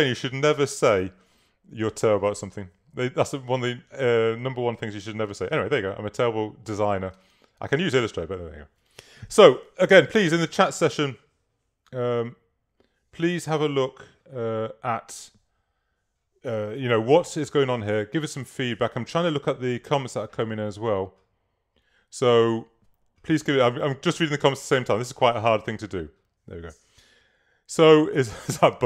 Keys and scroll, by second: 7.2 space.